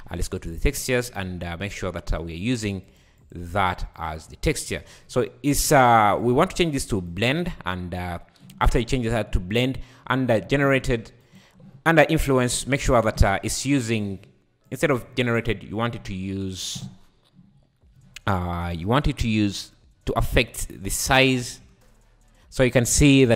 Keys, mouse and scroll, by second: 0.5 click, 1.1-2.3 scroll up 17, 2.8 click, 3.5 click, 4.6 scroll down 5, 4.9 scroll up 5, 6.1-8.1 drag, 8.1 scroll down 5, 11.2 shift+Right, 11.2-12.6 right drag, 12.6 space, 13.2 Escape, 14.7 click, 20.9 click, 21.4 space, 22.8-23.3 scroll up 5.